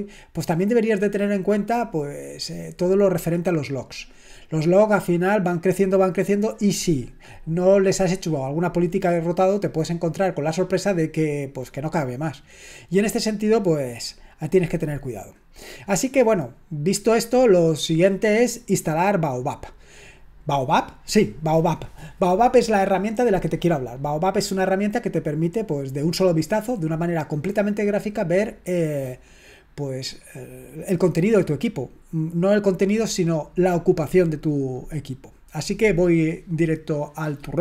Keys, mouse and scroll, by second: 37.2 click.